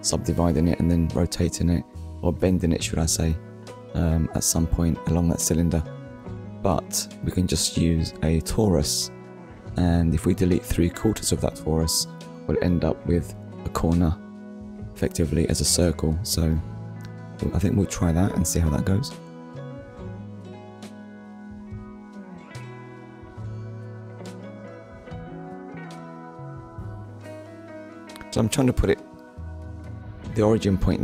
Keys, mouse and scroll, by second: 0.7 shift+right click, 3.7 middle click, 6.1 KP_1, 8.7 shift+a, 11.7 click, 14.6 click, 15.8 9, 16.5 Return, 18.7 click, 22.1 click, 23.8 click, 24.7 shift+click, 28.9 click, 29.0 shift+click, 30.3 click, 30.8 shift+click.